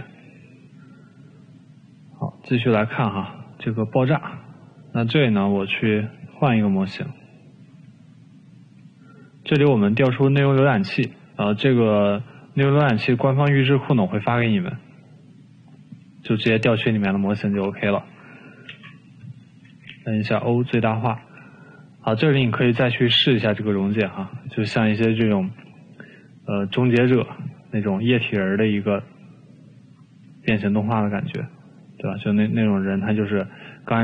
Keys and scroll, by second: 7.1 Delete, 19.4 o, 20.4 o, 21.9 e, 26.5 typing, 29.3 ctrl+z.